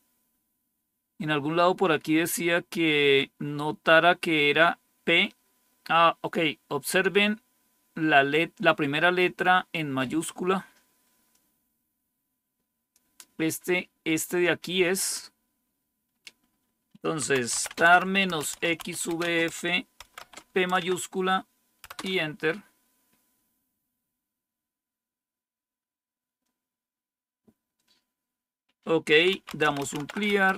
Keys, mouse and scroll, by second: 11.2-13.5 drag, 15.5-17.2 scroll down 3, 17.1-20.7 typing, 21.8 typing, 29.1-30.5 typing.